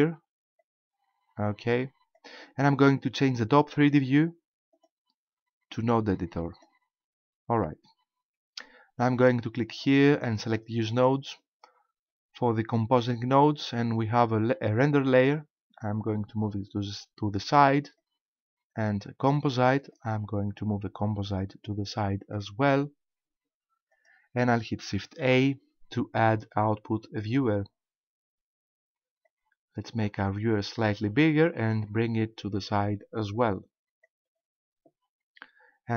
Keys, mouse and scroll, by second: 0.6 click, 4.7 click, 9.7 click, 10.9 click, 11.6-12.6 scroll up 10, 13.3-14.2 scroll up 1, 14.9 click, 18.0 click, 19.9 click, 23.9 click, 25.2 shift+a, 29.3 click, 31.9 click.